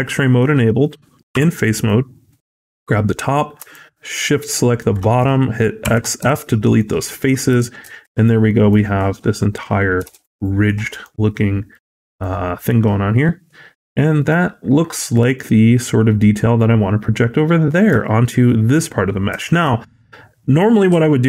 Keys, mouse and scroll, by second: 1.2 3, 1.7 click, 3.6 shift+click, 5.7 x, 6.4 scroll down 3, 6.6 middle click, 7.4 Tab, 7.8 shift+middle click, 8.0 scroll up 2, 8.3 middle click, 8.7 scroll up 1, 9.9 alt+z, 10.2-10.5 scroll down 2, 10.5 middle click, 10.9-11.5 scroll up 1, 11.6 click, 12.0 right click, 14.1 middle click, 15.0-15.4 scroll down 5, 17.5 middle click, 17.9 shift+middle click, 19.3 middle click, 19.7-20.1 scroll down 2, 20.0 scroll up 2.